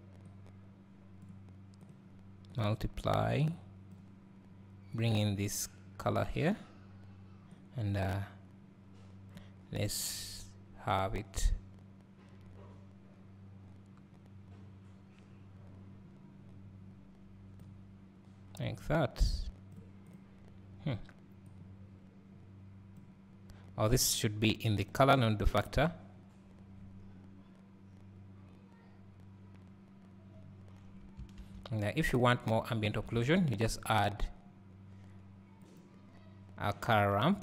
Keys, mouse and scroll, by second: 0.3-17.6 drag, 16.3 scroll up 1, 20.2 click, 24.0-31.6 drag, 32.1 click.